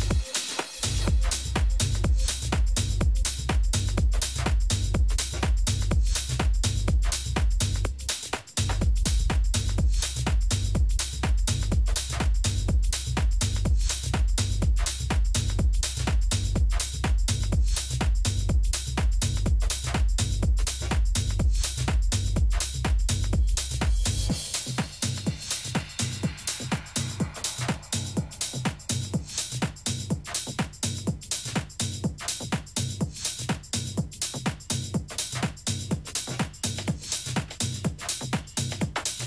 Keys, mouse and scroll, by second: 0.9-3.5 drag, 4.0 Delete, 5.4 right click, 6.0-7.3 middle drag, 9.3 KP_3, 11.1 z, 13.9-17.3 right drag, 14.7 a, 17.4 r, 19.3-22.9 middle drag, 23.0-24.9 middle drag, 25.1 r, 32.5-34.4 drag.